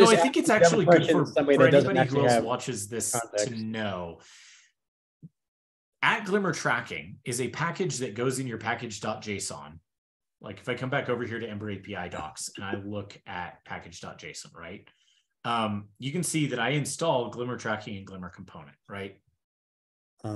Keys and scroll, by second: 13.6 ctrl+e.